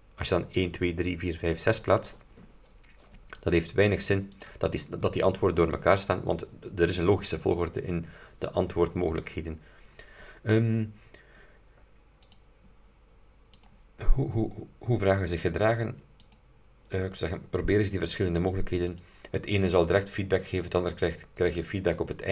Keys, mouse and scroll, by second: 3.4 click, 4.4 click, 12.4 click, 13.6 click, 16.3 click, 19.0 click, 20.6 click.